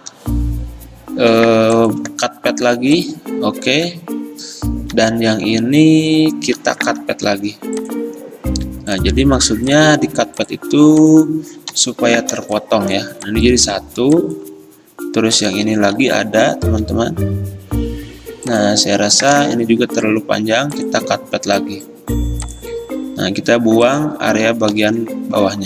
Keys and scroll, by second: 5.1 =, 7.3 a, 11.8 Delete, 20.6-21.4 typing, 24.8 Delete.